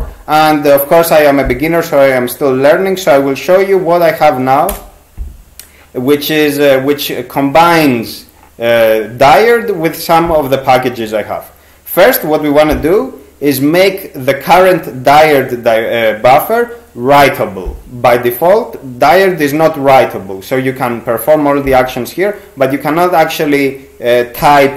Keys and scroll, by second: 4.7 Return.